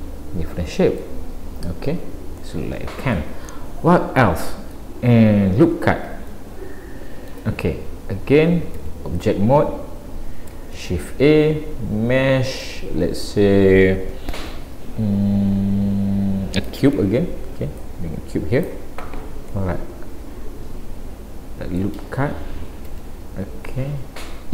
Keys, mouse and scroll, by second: 0.0 middle click, 1.2-1.8 scroll down 3, 1.8 scroll down 1, 1.9 scroll up 1, 2.4 middle click, 3.5 middle click, 6.3 shift+middle click, 8.9 Tab, 10.8 shift+a, 17.8 click, 19.6 middle click, 22.9 Tab, 23.7 middle click.